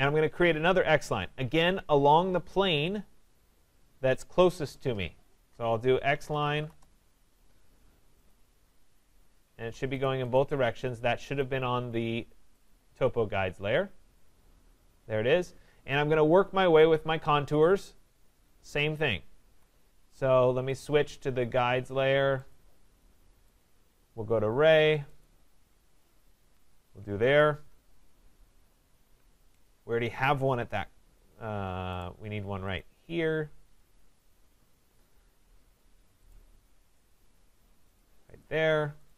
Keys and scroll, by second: 6.7 Return, 9.5 Escape, 19.5 Escape, 27.7 Return, 34.4 Return.